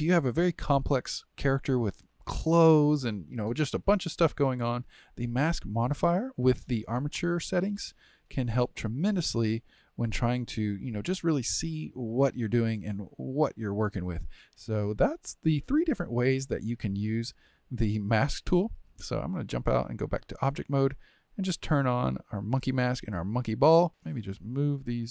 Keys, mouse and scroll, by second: 0.4-8.8 shift+middle drag, 8.8 click, 10.2 click, 11.1-12.6 middle drag, 12.6 r, 14.9-18.9 middle drag, 19.2-22.3 drag, 23.4 click, 23.9-25.1 middle drag.